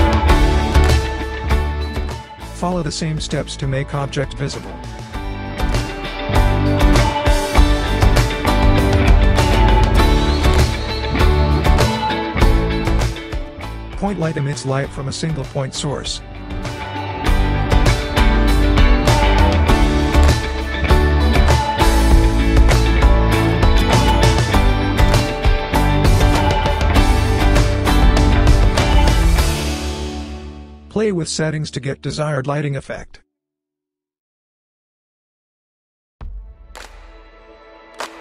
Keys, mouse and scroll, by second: 1.6 click, 1.6 typing, 3.3 typing, 5.8-8.6 drag, 5.8 typing, 13.1-14.7 drag, 13.1 typing, 19.1 typing, 25.4-32.2 drag, 25.7-26.3 typing, 34.8-35.7 drag, 34.8 typing.